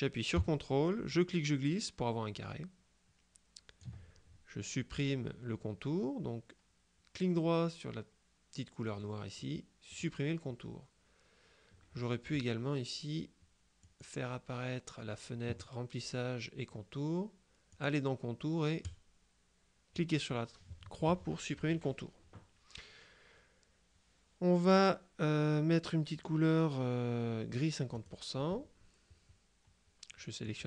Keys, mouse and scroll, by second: 1.2-4.4 ctrl+drag, 9.1 right click, 10.0 click, 13.9 click, 17.8 click, 18.9 click, 28.0 click, 30.5 click.